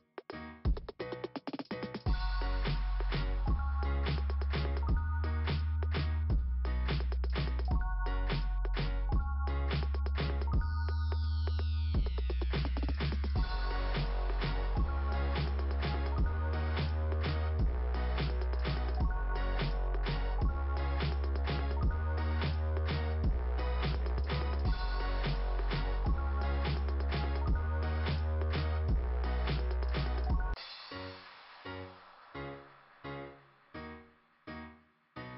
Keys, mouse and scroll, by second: 1.1-1.5 scroll down 2, 2.8 click, 4.4 right click, 5.4 right click, 7.3 click, 7.6 click, 7.8 click, 9.6 scroll up 2, 11.8-12.6 scroll up 1, 13.9-14.3 scroll down 2, 19.6 click, 21.9 click, 26.0 click, 28.1 scroll up 2, 30.5 ,, 32.6 click, 34.2 right click, 34.6 right click.